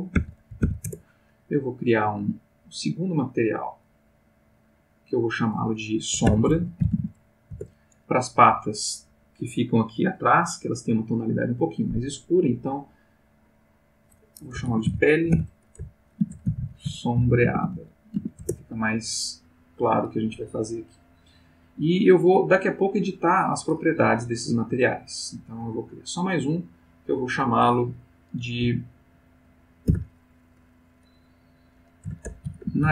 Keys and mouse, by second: 0.1 e, 0.5 l, 0.7 e, 0.8 Return, 2.5 click, 3.8 click, 5.3 click, 6.2 shift+s, 6.4 shift+o, 6.8 shift+b, 6.9 shift+a, 7.5 Return, 13.5 click, 14.7-18.1 typing, 18.4 Return, 24.9 click, 26.1 click, 26.9 click, 29.9 shift+f, 32.0-32.9 typing.